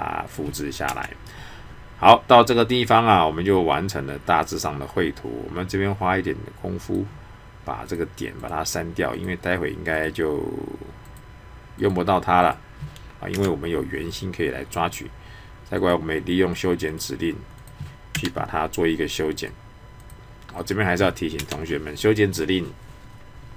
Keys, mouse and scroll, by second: 6.9 click, 15.8 click.